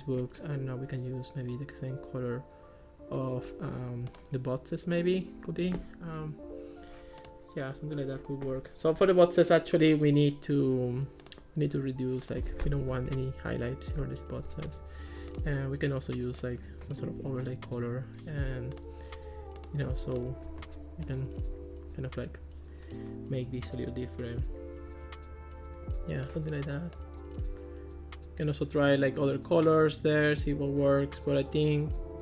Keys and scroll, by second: 13.0 0, 14.0 Return.